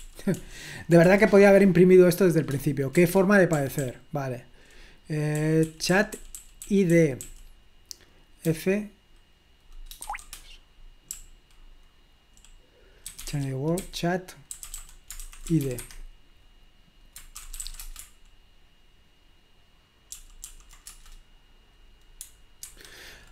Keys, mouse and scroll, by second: 0.0 ctrl+p, 0.3 ctrl+p, 1.0 Return, 3.6-8.5 typing, 10.3-16.1 typing, 17.3-18.1 typing, 18.1 Return, 20.2 ctrl+p, 20.4 ctrl+p, 20.9 Return, 22.7 super+1.